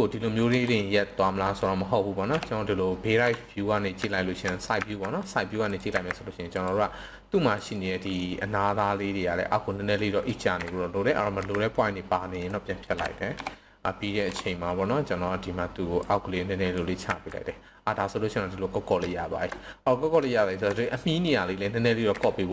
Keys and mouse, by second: 0.4 KP_2, 4.0 shift+middle drag, 4.8 z, 5.6 click, 5.9 c, 7.6 click, 7.7 right drag, 10.6 KP_7, 11.4 c, 12.4 right click, 12.8 KP_1, 16.0-16.8 drag, 17.1 z, 19.1 shift+middle click, 20.3 shift+middle drag, 21.9 KP_7.